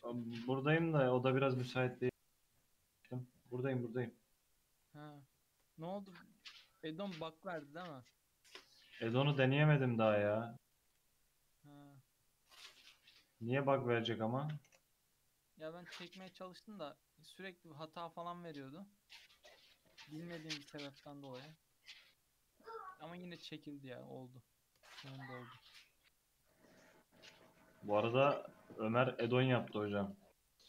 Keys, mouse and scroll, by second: 0.1-0.6 shift+scroll up 1, 0.6 Tab, 1.3 Tab, 1.7 ctrl+r, 3.9-4.6 scroll up 2, 4.6 3, 4.9 alt+z, 5.6 click, 6.4 e, 10.1 1, 10.4 click, 10.8 g, 15.7 click, 16.4 scroll up 1, 16.5 middle click, 16.9-17.6 scroll down 3, 18.1 3, 18.2 click, 19.1 shift+click, 19.7 x, 20.9-21.5 middle drag, 21.5 click, 22.6 shift+click, 23.0 x, 23.7 middle click, 24.1-24.9 scroll up 2, 24.9-25.4 shift+middle drag, 25.4 1, 25.6-26.3 middle drag, 26.3 click, 27.1 shift+click, 27.8 shift+click, 28.5 shift+click, 29.0 f, 30.2 2, 30.4 click.